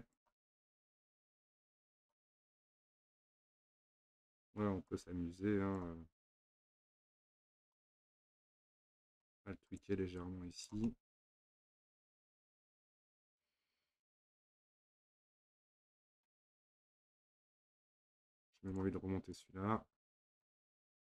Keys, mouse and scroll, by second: 0.6 click, 1.1 click, 2.2 middle click, 2.9 scroll down 1, 3.2 middle click, 3.8-4.3 scroll up 1, 4.3 click, 4.9 click, 7.3 click, 8.2 click, 9.7 click, 10.2 click, 10.9-13.9 middle drag, 18.0-18.7 middle drag, 18.7 click, 19.4 click, 20.6 middle click.